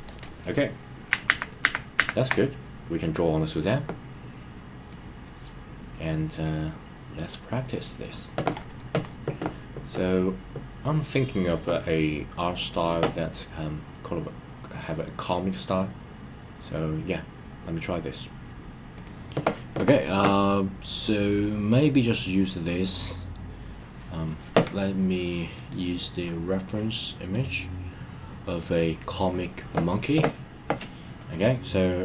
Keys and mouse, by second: 0.1 click, 1.2 super+z, 1.6 super+z, 3.1 middle click, 4.9-8.0 middle drag, 21.1-21.7 middle drag, 31.2-32.0 middle drag.